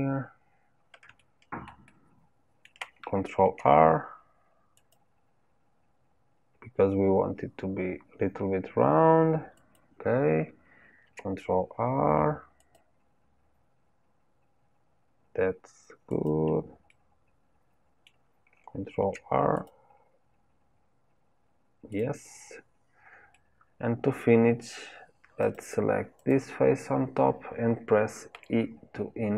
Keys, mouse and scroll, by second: 0.2-0.7 scroll up 1, 0.7-1.1 scroll up 1, 1.3-3.4 shift+middle drag, 3.4 ctrl+r, 11.0 ctrl+r, 16.8-18.9 middle drag, 18.9 ctrl+r, 23.3-25.4 middle drag, 25.4 click, 26.1 click.